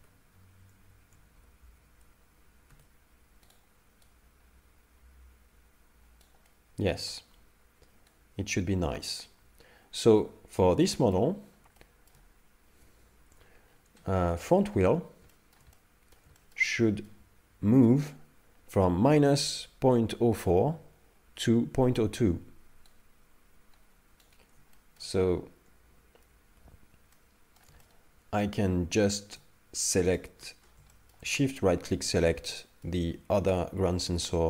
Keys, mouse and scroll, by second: 0.0 a, 1.4 alt+g, 1.7 alt+r, 2.7 alt+s, 3.5 right click, 4.1 right click, 6.5 middle click, 8.1 right click, 8.2 right click, 10.8 middle click, 11.5 scroll down 1, 11.8 shift+middle click, 13.3 KP_5, 13.7-14.5 scroll up 7, 14.5 shift+middle click, 14.9 scroll up 2, 15.3 shift+middle click, 15.7 middle click, 16.4 shift+middle click, 16.7 middle click, 22.9 right click, 23.0 right click, 24.7 shift+middle click, 26.5 alt+g, 27.1 middle click, 27.8 shift+middle click, 30.1 shift+right click, 30.6 scroll down 2, 30.9 shift+middle click, 31.3 middle click, 32.6 shift+middle click, 33.1 middle click.